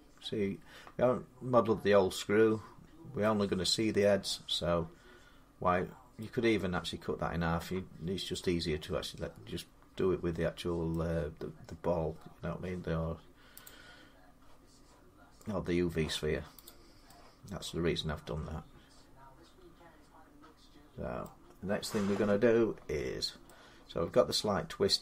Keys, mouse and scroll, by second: 3.0-5.5 middle drag, 3.4 scroll down 2, 10.7 middle click, 12.9 middle click, 13.5-21.0 drag, 21.0 middle click.